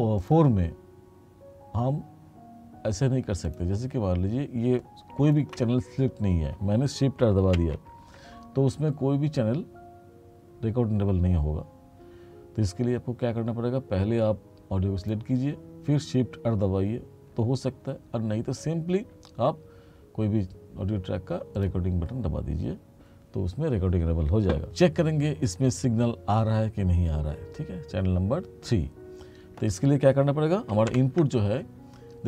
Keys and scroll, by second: 7.6 shift+r, 31.0 ctrl+=.